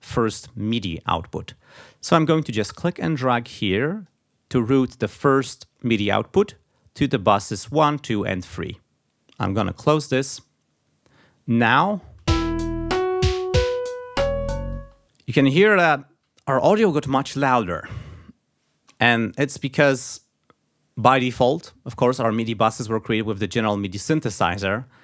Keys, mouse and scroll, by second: 9.4 click, 11.6 click, 12.3 space, 14.8 space, 19.4 click.